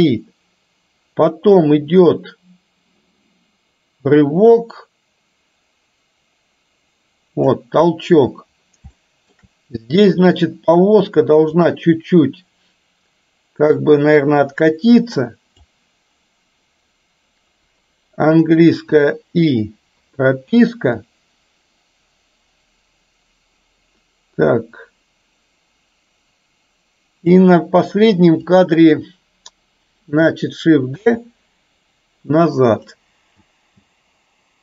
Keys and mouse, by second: 9.1 shift+middle click, 11.7 click, 14.0-15.7 drag, 21.1-27.5 drag, 28.2-28.6 drag, 31.1 shift+d, 33.5 space.